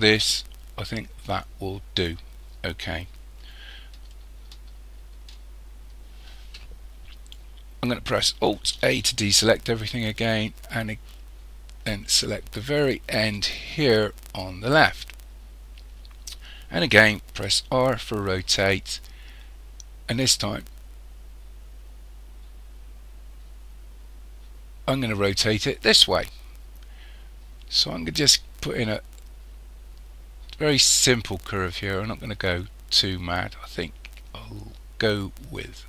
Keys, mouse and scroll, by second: 4.2-5.5 shift+middle drag, 5.5-6.7 scroll down 2, 8.8 alt+a, 10.2-11.0 scroll up 1, 11.0-11.8 scroll up 2, 13.3 click, 15.2-16.9 scroll down 3, 16.9-17.5 scroll down 1, 17.5 r.